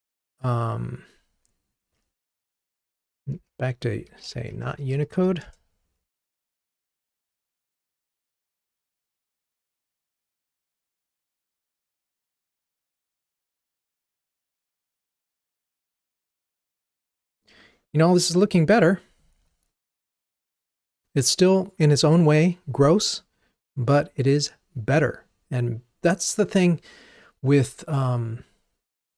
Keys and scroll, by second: 1.3 shift+F6, 6.2 ctrl+r.